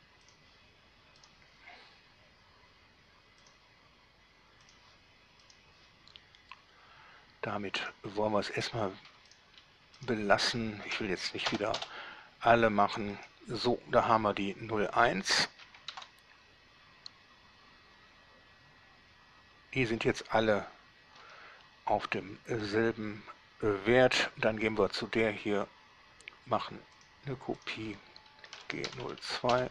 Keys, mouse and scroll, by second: 0.6 click, 1.4 middle click, 3.7 click, 4.9 click, 5.7 middle click, 8.0 click, 8.8 click, 9.6 drag, 10.2 shift+drag, 10.7 shift+drag, 11.7 shift+Delete, 12.0 Return, 13.4 right click, 16.2 alt+a, 21.4 Escape, 23.0 middle click, 27.2 click, 27.9 click, 28.8 shift+g, 29.1 0, 29.3 2.